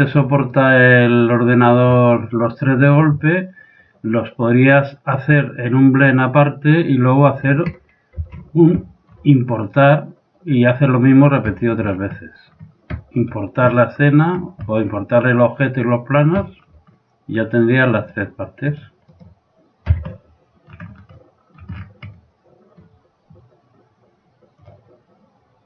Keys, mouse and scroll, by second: 2.0-4.1 middle drag, 8.2 ctrl+z, 8.8-10.6 middle drag, 11.5-18.0 middle drag, 18.0-20.1 right drag, 20.0 a, 20.1 middle click, 20.3 right click, 20.4 click, 20.7-22.2 middle drag, 23.3 middle click.